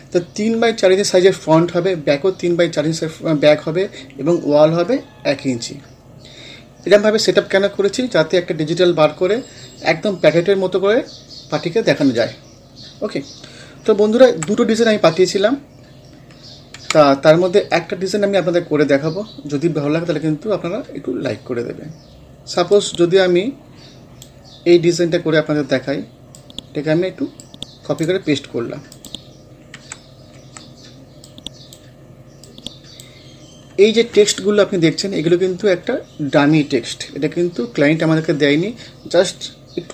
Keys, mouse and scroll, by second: 14.3 Page_Down, 16.8 Page_Up, 22.7-24.8 drag, 24.8-25.4 scroll down 1, 26.4 click, 27.4-29.0 right drag, 29.0 click, 29.8 Page_Down, 31.3-33.8 drag, 33.8-34.1 scroll up 1.